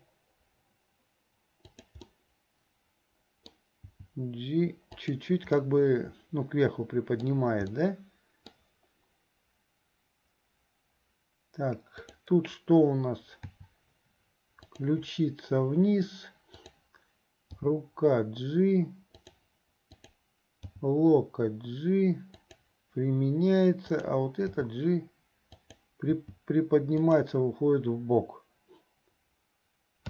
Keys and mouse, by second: 2.3-3.7 drag, 2.3-3.7 right drag, 5.9-7.5 middle drag, 7.9 middle click, 12.0 click, 13.6 r, 20.0 click, 23.9 click.